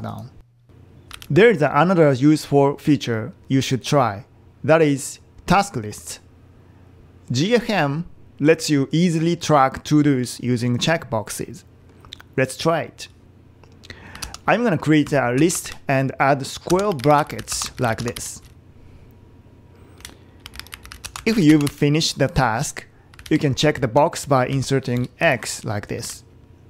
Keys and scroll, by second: 1.2 super+e, 14.2 typing, 16.5-22.0 typing, 23.2 Left, 23.4 Right, 23.6 Right, 25.0 typing, 26.0 Right.